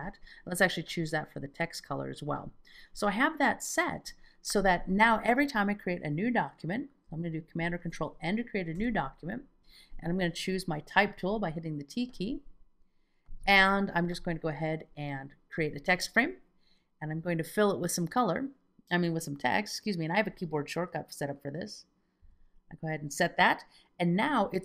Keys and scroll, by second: 7.6 super+n, 8.7 Return, 22.2 F2.